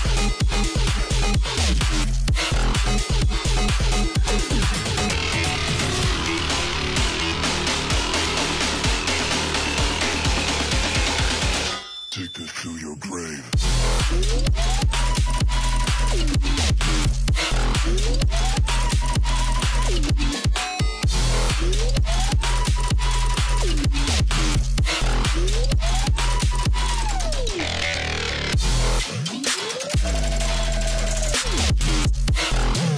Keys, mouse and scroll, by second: 3.0 alt+scroll up 1, 3.3 click, 4.3 i, 4.6 click, 8.5 alt+scroll down 1, 9.0 click, 9.2 space, 10.2 alt+scroll up 1, 10.4 space, 10.5 click, 11.4 alt+scroll up 1, 12.3-15.7 drag, 15.7 ctrl+z, 16.3-18.9 drag, 20.6 click, 25.0 alt+scroll up 1, 25.8 click, 26.5 ctrl+shift+[, 26.8 shift+click, 27.7-28.0 alt+scroll up 1, 28.3 click, 30.1 click, 31.6 shift+click.